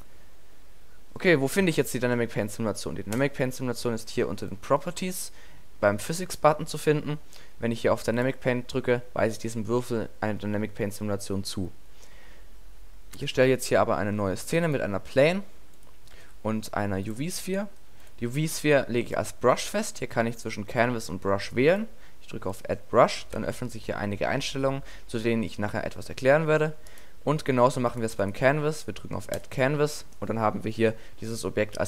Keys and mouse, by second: 4.7-8.3 drag, 13.3 x, 13.7 middle click, 14.1 shift+a, 15.1 s, 15.8 click, 16.2 shift+a, 21.7-24.3 drag, 24.4-26.9 middle drag, 29.4-31.2 drag, 31.2-31.8 middle drag.